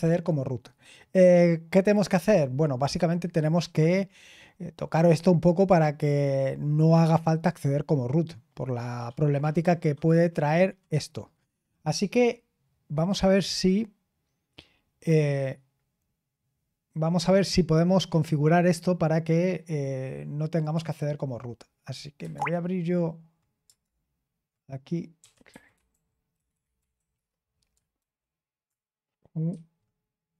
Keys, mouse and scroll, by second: 13.1 click, 20.6 click, 22.3 alt+Return, 23.8 super+Return, 24.9-27.4 typing, 27.9 super+j, 29.4 shift+super+q.